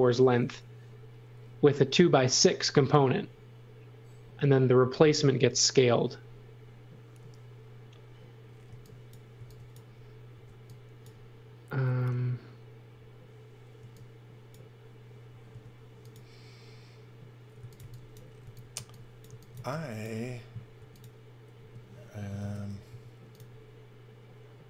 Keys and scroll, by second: 8.9 x, 9.4 x, 10.6 x, 13.8 x, 15.5 c, 17.6-19.6 typing, 20.8-23.4 typing, 22.4 super+z.